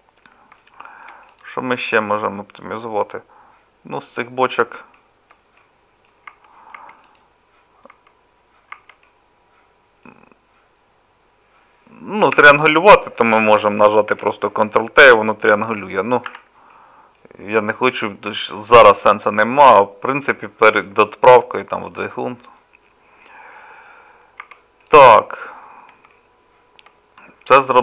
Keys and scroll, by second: 1.7 Tab, 6.3 Tab, 6.8 Tab, 7.9 Tab, 8.8 Tab, 12.4 3, 14.1 ctrl+t, 14.2 3, 16.3 ctrl+z, 16.3 ctrl+t, 24.4 Tab.